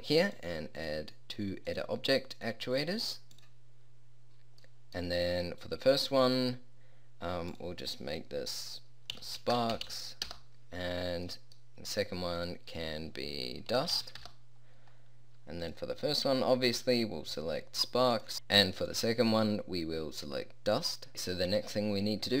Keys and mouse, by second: 0.2 click, 12.4-14.1 drag.